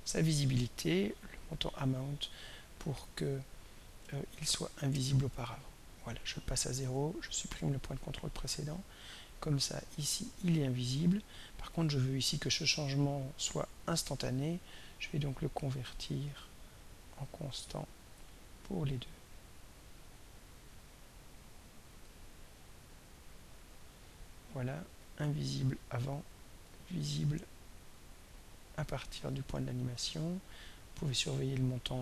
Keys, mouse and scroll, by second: 0.0 click, 1.1 click, 3.9 0, 4.8 Return, 6.9 right click, 7.9 click, 9.0 click, 10.5 click, 13.8 right click, 17.0 click, 18.2 right click, 20.5 click, 22.0-24.2 drag, 25.0 click, 26.6-28.2 drag, 29.3 click.